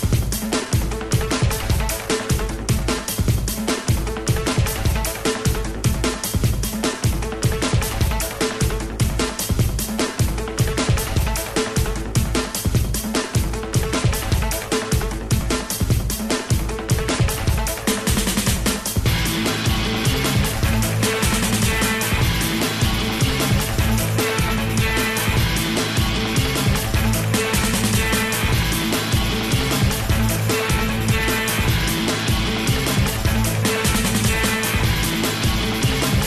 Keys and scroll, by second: 12.2 i, 12.9 i, 22.4 i.